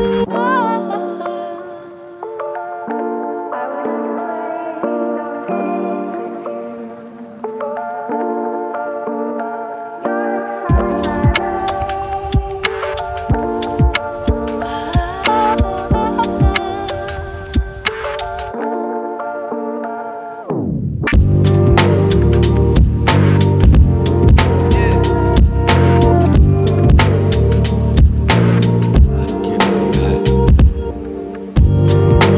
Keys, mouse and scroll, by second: 0.0-1.2 typing, 0.8 scroll down 1, 1.0 click, 1.5-1.8 scroll down 2, 1.8 click, 2.0 click, 2.5 click, 2.8 g, 2.9 right click, 3.2 click, 3.3 KP_1, 3.4 g, 3.8 /, 4.0 alt+z, 4.0-4.9 scroll down 8, 4.1 click, 4.5 ctrl+z, 4.9 click, 5.1 click, 5.4 s, 5.7 click, 5.9 /, 6.0 ctrl+z, 6.1 ctrl+z, 6.2 ctrl+z, 6.3 scroll down 4, 6.4 click, 7.0 click, 7.2 ctrl+z, 7.3 scroll down 1, 7.3 scroll up 1, 7.4 shift+Left, 7.7 click, 7.9 KP_1, 8.2 Right, 8.3 Right, 8.4 click, 8.4 scroll up 1, 8.5 click, 8.7 alt+z, 8.8 alt+z, 9.0 /, 9.3 alt+z, 9.5 KP_4, 9.6 KP_4, 9.6 KP_1, 9.8 Right, 10.3 Left, 10.5 alt+z, 10.8-12.2 typing, 10.8 alt+z, 11.0 click, 11.2 click, 11.3 click, 11.5 scroll down 4, 11.7 click, 11.7 scroll up 2, 11.8 click, 12.1 scroll down 2, 12.5 KP_Add, 16.2 ctrl+KP_8, 16.3 ctrl+KP_8, 16.3 ctrl+KP_8, 17.1 ctrl+KP_8, 17.2 ctrl+KP_8, 18.4-18.8 scroll up 2, 18.8 scroll down 1, 21.5-22.5 drag, 24.9 click, 26.8-27.5 drag, 28.0 click, 28.6 x, 29.5 click, 30.5 ctrl+z, 30.9 ctrl+z.